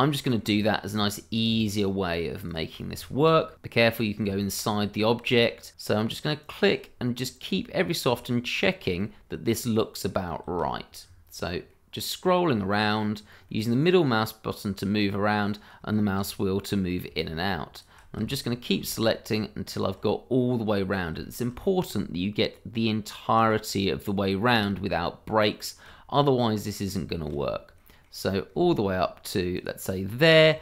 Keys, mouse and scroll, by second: 0.0 middle click, 0.7 shift+middle click, 1.2 scroll down 1, 2.5 click, 3.0 shift+middle click, 3.1 middle click, 3.2 shift+middle click, 3.6 middle click, 3.8 scroll up 1, 5.0 shift+middle click, 5.2 middle click, 6.4 click, 6.9-7.4 scroll down 1, 7.4-7.8 scroll up 1, 9.0 shift+middle click, 9.5-9.9 scroll up 1, 10.1 middle click, 10.7-11.0 scroll down 1, 11.7 middle click, 12.1-12.5 scroll down 1, 13.5 middle click, 15.6 scroll up 1, 15.9 shift+middle click, 16.2-17.0 shift+scroll up 2, 17.7 ctrl+click, 18.0 click, 18.2 shift+middle click, 18.3 middle click, 19.7 ctrl+click, 20.3 middle click, 20.9 scroll down 1, 21.2 shift+middle click, 21.6 middle click, 23.0 click, 23.7 middle click, 25.6 click, 26.0-26.4 scroll down 1, 26.4 middle click, 27.3-27.7 shift+scroll up 1, 27.7 middle click, 29.5 ctrl+click, 30.0 click, 30.1-30.5 scroll down 1.